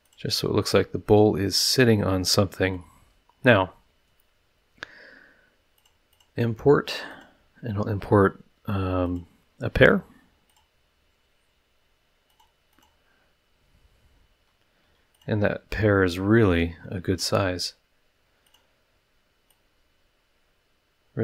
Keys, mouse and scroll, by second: 0.0 click, 0.7 scroll up 2, 1.1-2.6 middle drag, 2.6-2.9 drag, 3.4 middle click, 5.7 click, 6.1 click, 7.1 click, 9.0 click, 10.5 click, 12.3 click, 12.7 click, 14.3 s, 15.1 click, 16.1-17.4 drag, 18.4 click, 19.5-21.2 drag.